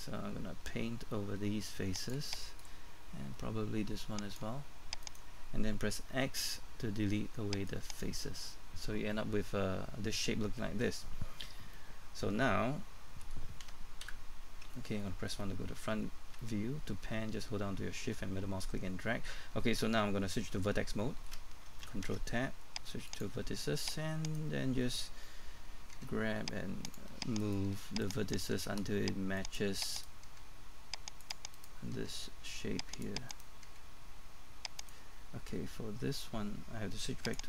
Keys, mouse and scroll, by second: 5.0 right click, 6.1 typing, 7.7 click, 11.7 middle click, 14.0 KP_1, 15.2 shift+middle click, 16.0-16.4 scroll up 1, 16.4 shift+middle click, 22.1 ctrl+Tab, 23.1 click, 24.3 right click, 25.9 g, 26.9 click, 27.4 right click, 27.7 g, 28.0 click, 28.3 right click, 28.5 g, 29.4 click, 29.9 right click, 30.2 g, 31.2 click, 31.5 right click, 32.0 g, 32.9 click, 33.3 right click, 33.6 right click, 37.3-37.4 drag.